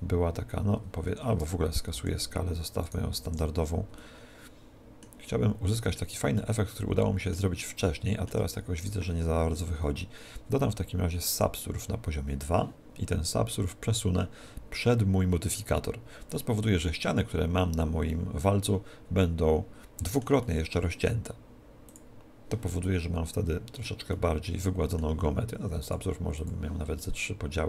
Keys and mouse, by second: 1.9 alt+s, 2.9 right click, 3.3 alt+s, 4.0-9.6 middle drag, 8.8 right click, 10.7 middle click, 11.3 ctrl+2, 18.5-27.6 middle drag, 21.9 click, 25.9 click.